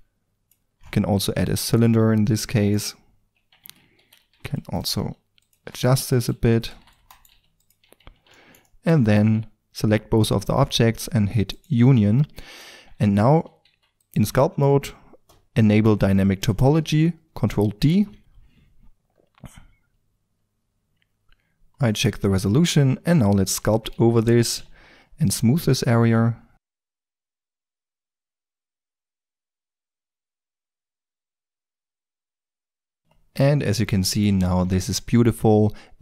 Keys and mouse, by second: 1.1 g, 1.5-2.1 drag, 3.5 Tab, 3.9-7.3 typing, 6.6-7.9 drag, 7.8 Tab, 9.0 right click, 11.5-13.6 drag, 12.7 Tab, 13.6 f, 14.1-16.0 drag, 17.9 ctrl+d, 18.2 3, 21.4-21.9 drag, 22.3 f, 23.9 f, 26.8 click, 27.1-27.7 drag, 28.0-28.6 drag, 28.7-29.8 drag, 29.8 middle click, 29.9-33.1 drag, 33.1 middle drag, 33.4 click, 33.5-34.9 middle drag, 34.9 Tab.